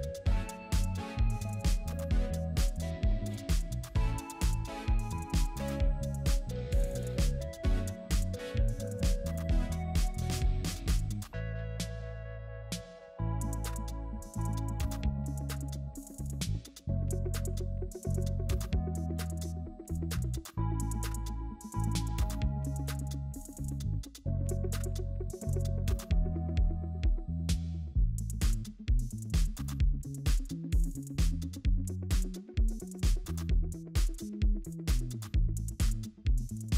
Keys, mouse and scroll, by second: 0.0-1.5 typing, 7.9 ctrl+g, 9.4 double click, 10.0-11.0 typing, 13.2-15.0 typing, 17.7 ctrl+j, 20.7 space, 27.6 typing, 33.2 typing.